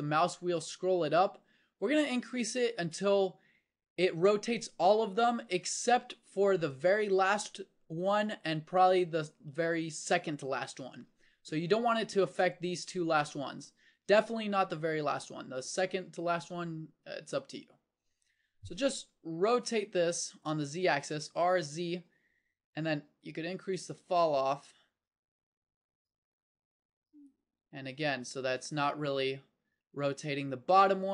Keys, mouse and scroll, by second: 15.8 r.